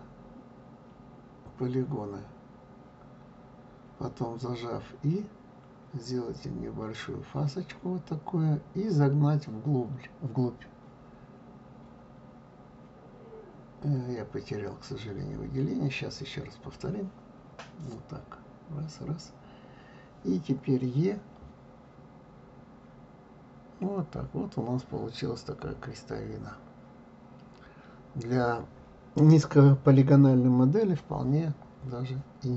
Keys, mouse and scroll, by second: 2.2 click, 3.4 shift+click, 4.8 shift+click, 5.6 shift+click, 14.9 click, 16.1 r, 17.5 click, 19.6 shift+click, 20.9 shift+click, 21.6 shift+click, 22.6-24.7 middle drag, 24.7 e, 32.4-32.5 middle drag.